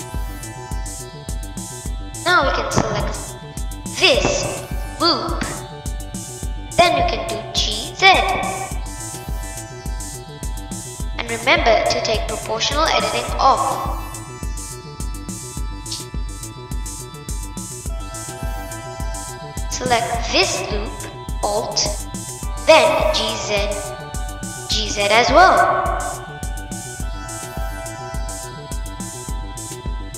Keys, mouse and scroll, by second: 2.7 click, 4.6 click, 20.8 click, 29.2-30.1 middle drag.